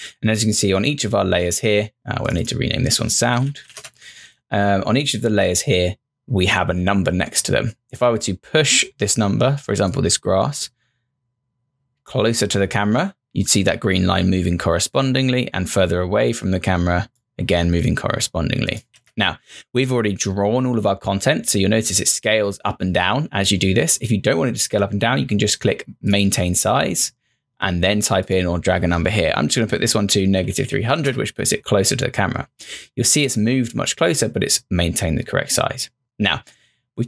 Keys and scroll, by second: 3.0-4.1 typing, 18.8 0, 18.9 Return, 29.8-31.1 typing.